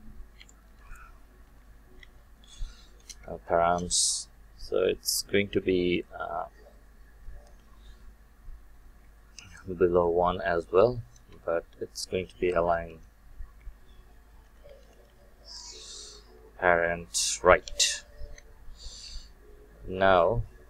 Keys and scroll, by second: 3.0 Return, 8.9 Return, 18.2 Return.